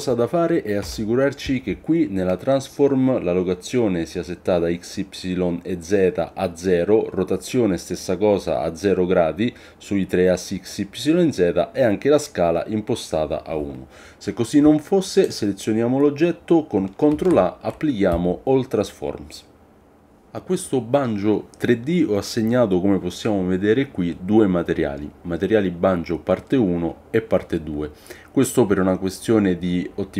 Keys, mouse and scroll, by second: 0.8 n, 15.2 click, 17.2 ctrl+a.